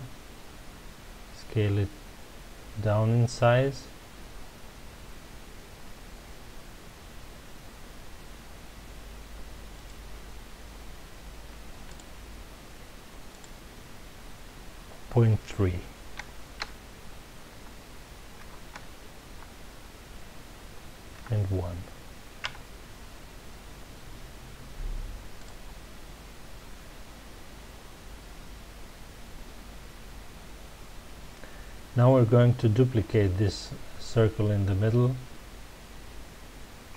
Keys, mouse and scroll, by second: 9.8 click, 11.9-16.4 drag, 22.5 KP_Enter, 25.4 drag.